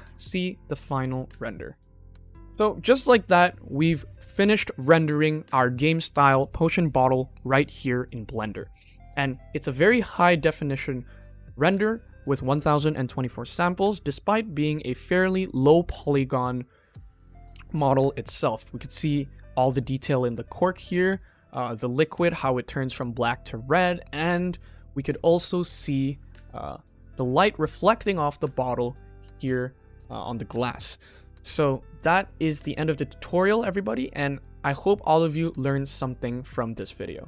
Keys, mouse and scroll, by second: 1.6 click.